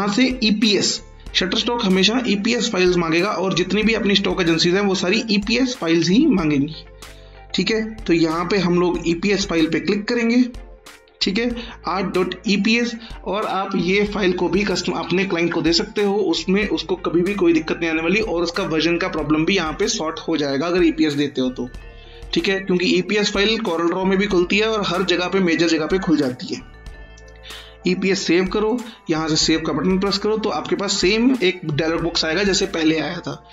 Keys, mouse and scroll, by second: 5.3 click, 8.9 click, 28.6 click.